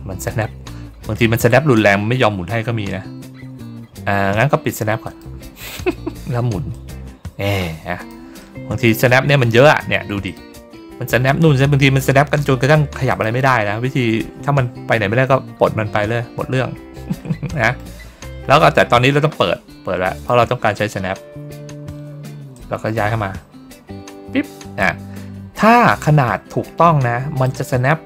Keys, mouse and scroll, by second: 1.3 ctrl+middle click, 2.9 ctrl+middle click, 3.2 ctrl+middle click, 3.5 ctrl+middle click, 4.9 click, 6.6-8.0 drag, 8.3 middle click, 10.2 click, 13.0 click, 16.6 ctrl+middle click, 17.4 middle click, 18.0 ctrl+middle click, 20.1 click, 22.4-27.3 drag.